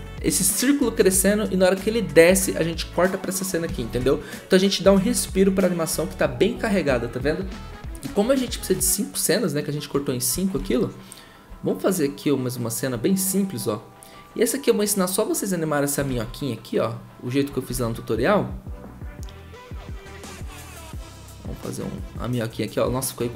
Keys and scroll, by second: 3.9 ctrl+z, 10.5 ctrl+z, 16.1 ctrl+z, 17.7 ctrl+z.